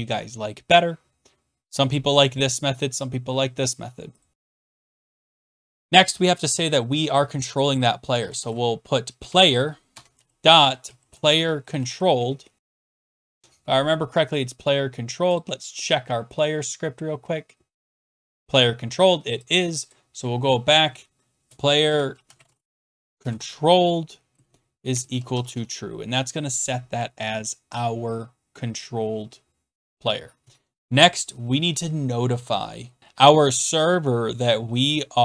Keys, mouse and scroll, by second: 4.2 click, 5.3 Return, 7.8-13.3 typing, 15.4 click, 16.3-17.1 scroll down 12, 18.3 click, 18.4 click, 19.5 click, 19.9 click, 20.5 scroll, 21.6-26.0 typing, 24.3 click, 29.0 click, 30.4 Return, 31.0 click, 31.1 click, 31.2 click, 33.0 click.